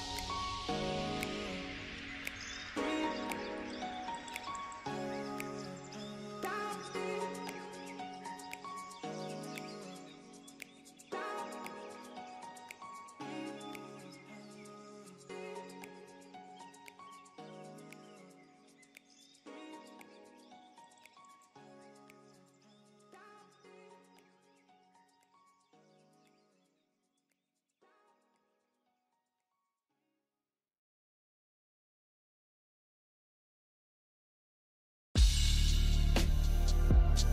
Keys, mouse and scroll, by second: 13.5 ctrl+k.